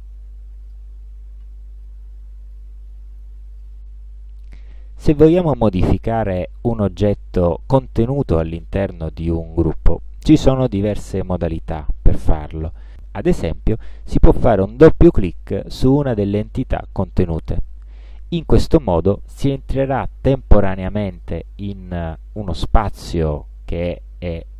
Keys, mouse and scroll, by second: 0.7 click, 1.9 click, 3.7 click, 17.6 click, 19.5-20.9 drag, 21.3-22.3 drag, 22.6 click.